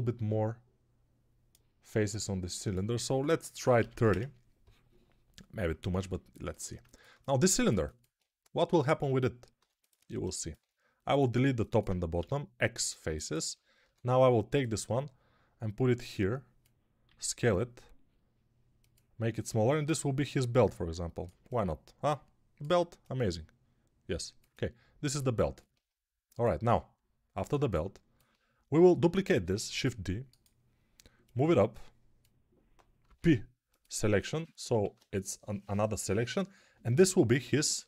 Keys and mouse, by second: 5.8 Tab, 9.4 3, 10.1-16.7 alt+drag, 12.0 x, 13.7 a, 16.9 s, 18.8-19.9 drag, 29.5 shift+d, 32.6-37.8 drag, 32.9 p, 34.7 alt+q, 37.3 a.